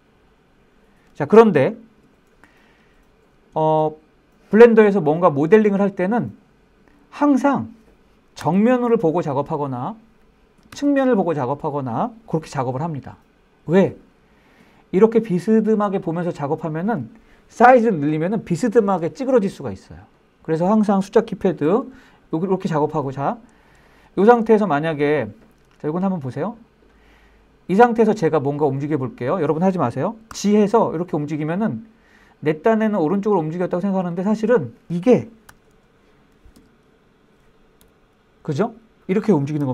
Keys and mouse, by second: 1.6 Escape, 2.8 shift+middle drag, 3.2-5.0 middle drag, 5.2 shift+middle drag, 5.6 middle click, 8.0 KP_1, 10.3 KP_3, 14.2-15.5 middle drag, 21.3 KP_1, 23.5-23.8 shift+middle drag, 24.2-24.6 shift+middle drag, 25.7-27.4 middle drag, 29.9 g, 33.7 click, 35.1 KP_1, 36.4 KP_3, 37.5 KP_7, 39.2 KP_1.